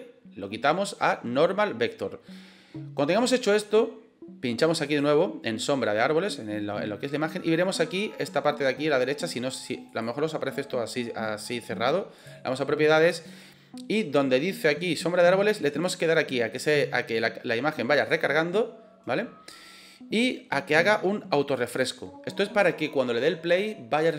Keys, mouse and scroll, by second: 4.7 click, 9.8 click, 12.1 click, 17.9 click, 21.4 click.